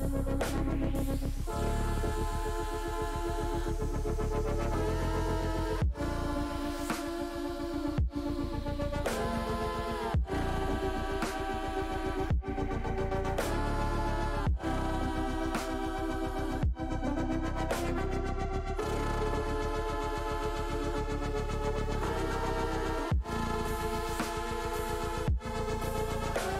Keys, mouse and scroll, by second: 0.5 s, 8.0 click, 9.2 ctrl+z, 10.4-13.1 drag, 13.7 middle click, 13.9 middle click, 14.6 middle click, 15.4 click, 17.0 click, 20.2 alt+shift+click, 21.1 click, 24.2 click, 26.3 click.